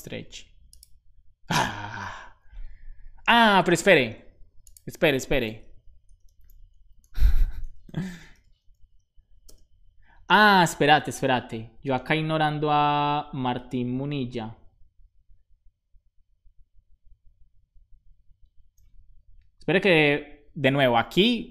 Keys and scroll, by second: 6.0-9.3 typing.